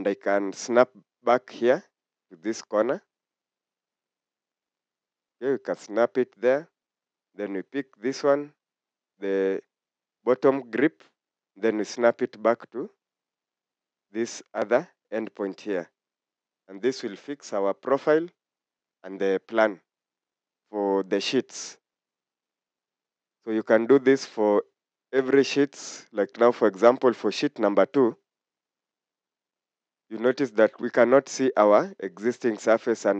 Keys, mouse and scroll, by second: 12.4 click, 13.4 click, 17.2 Escape, 17.5 Escape, 23.3 scroll down 1.